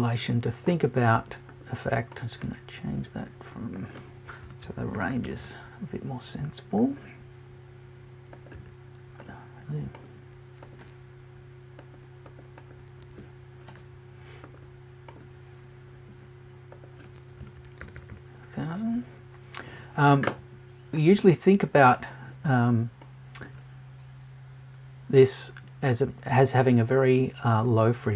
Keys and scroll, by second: 4.4 BackSpace, 17.4 BackSpace.